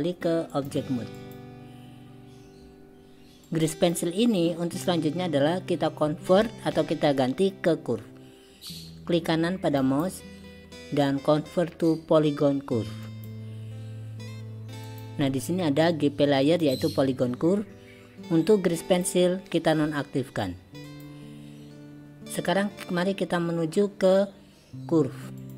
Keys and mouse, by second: 0.6-1.4 drag, 3.7 click, 9.8-13.3 right drag, 14.9 click, 16.5 click, 18.9 click, 20.9 click, 25.4 click.